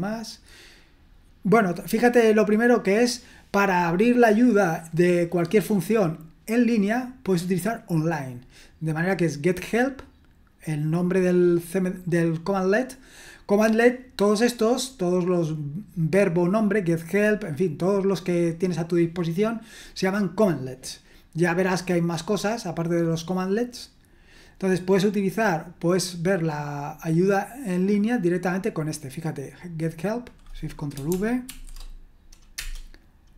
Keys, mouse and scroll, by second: 1.6-2.5 scroll up 2, 21.9-23.0 scroll down 1, 23.0-23.7 scroll down 1, 23.7-24.8 scroll down 1, 29.0-31.1 drag, 31.4 ctrl+v, 32.6 Return.